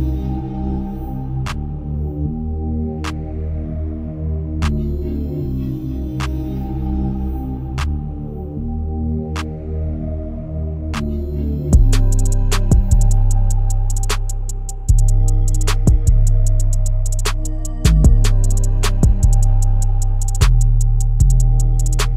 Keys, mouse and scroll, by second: 0.4-1.6 middle drag, 1.6 click, 2.3-3.7 middle drag, 3.7 z, 5.1 KP_0, 5.7 KP_1, 6.5 z, 9.2-12.3 drag, 13.5 click, 14.1-17.3 drag, 19.4-20.4 middle drag, 20.9-21.9 middle drag, 21.9 KP_1.